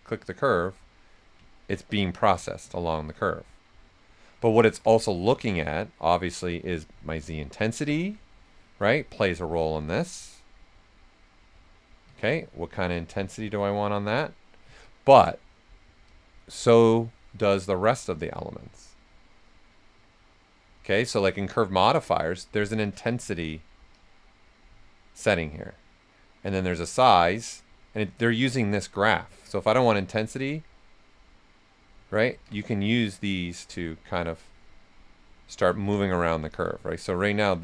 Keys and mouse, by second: 1.1 right click, 2.3 s, 2.4-4.4 drag, 4.4 ctrl+z, 7.8 click, 8.8 click, 10.0-12.3 drag, 12.3 ctrl+z, 12.9 click, 13.9-15.2 right drag, 15.2 ctrl+z, 16.0 click, 21.1-32.3 drag, 21.1 typing, 32.3 ctrl+z, 32.5 s, 32.6-34.7 drag, 34.7 right click, 35.4-36.9 typing, 36.6-37.6 drag.